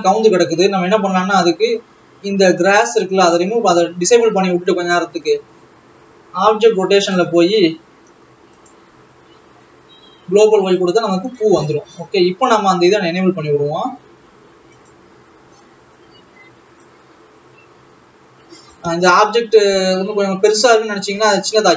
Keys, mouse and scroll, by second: 2.8-4.6 drag, 4.6-5.1 scroll down 6, 9.0-11.7 drag, 13.1-14.4 scroll up 12, 15.4 click, 17.8 click, 20.4-21.1 scroll down 3, 21.5-21.7 scroll down 10.